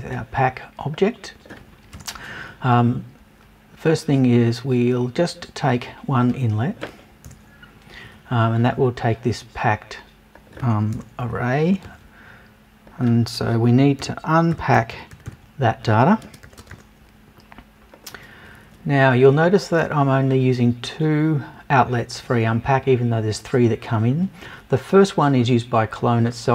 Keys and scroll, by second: 1.9 BackSpace, 7.3 BackSpace, 10.9 BackSpace, 11.7 super+BackSpace.